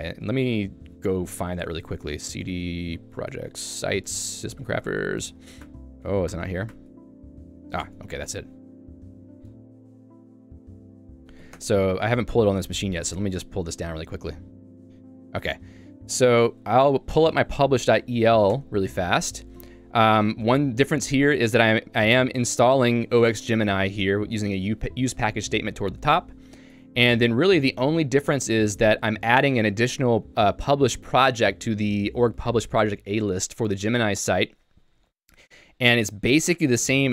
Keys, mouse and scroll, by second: 0.5 click, 0.9 d, 1.5 BackSpace, 1.6 BackSpace, 2.3 d, 3.4 Tab, 3.6-5.1 typing, 5.3 Tab, 5.9 Delete, 6.0 Delete, 6.5 Tab, 7.9 Return, 8.4-9.3 typing, 10.5 o, 11.7 Return, 16.1 click, 16.3 Escape, 18.8 Return, 19.7 ctrl+d, 20.3 ctrl+d, 20.8 j, 23.3-24.1 typing, 26.7 Escape, 27.7-30.3 typing.